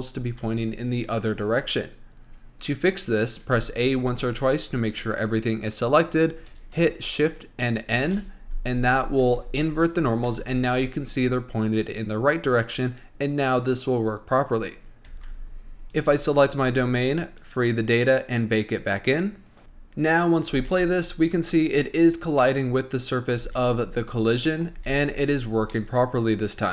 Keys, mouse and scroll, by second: 0.5 Tab, 3.7 a, 4.0 a, 8.1 shift+n, 9.6 Tab, 10.6 Tab, 10.9-13.9 middle drag, 14.9-15.6 scroll down 4, 15.3 Tab, 16.1 click, 16.5-17.0 scroll up 4, 17.6 click, 18.6-19.6 drag, 19.6-20.7 shift+middle drag, 20.7 space, 22.6-23.6 middle drag, 23.6 space, 24.2 click, 24.7 middle click, 25.0 space, 25.9-26.7 middle drag.